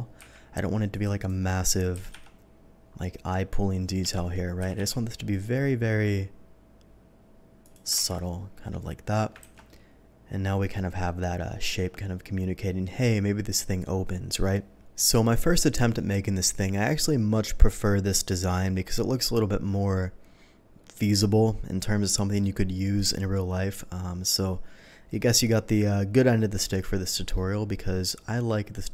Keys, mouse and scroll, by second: 0.3 q, 0.9 click, 1.1 click, 1.4-1.9 middle drag, 1.9 s, 2.1 z, 4.0 Escape, 4.5 s, 4.7 z, 7.6 click, 8.1 shift+2, 8.2-9.1 middle drag, 9.4 ctrl+s, 9.6-10.7 middle drag, 11.0 middle click, 25.1-26.7 middle drag, 27.3-28.9 middle drag.